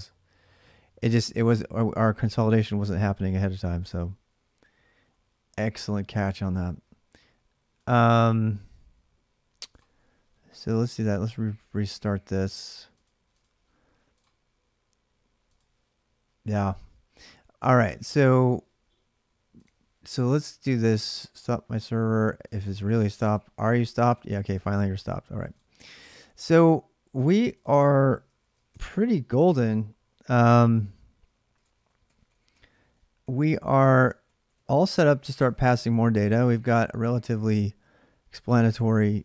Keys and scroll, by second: 25.9 alt+Tab, 28.2 ctrl+a, 28.5 2, 30.3 ctrl+[, 30.4-36.8 typing.